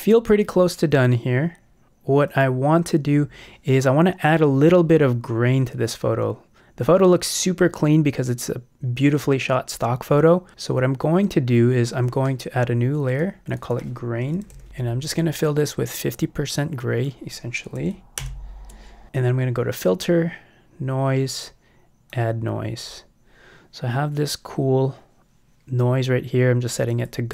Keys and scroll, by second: 14.4 shift+g, 14.6 shift+Return, 15.2 Return, 17.8 x, 18.2 super+BackSpace.